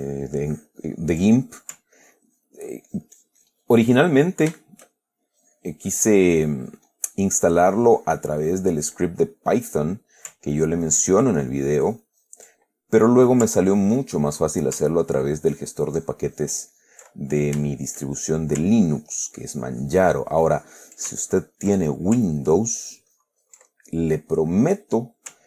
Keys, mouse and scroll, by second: 1.6-2.0 ctrl+middle drag, 2.3-4.3 ctrl+drag, 4.3-4.8 ctrl+middle drag, 4.9 ctrl+shift+middle click, 5.6-9.1 shift+drag, 10.2 middle click, 10.8-12.8 ctrl+drag, 12.8-13.7 ctrl+middle drag, 14.0-15.1 ctrl+drag, 14.7 ctrl+middle click, 15.4 ctrl+click, 16.2 ctrl+click, 17.4-17.8 ctrl+middle drag, 18.0-18.4 ctrl+shift+middle drag, 18.6 shift+middle click, 19.2-22.1 ctrl+shift+drag, 22.1 ctrl+middle click, 22.7-24.0 ctrl+drag, 24.0 ctrl+middle click, 24.5 ctrl+click, 25.3 ctrl+click.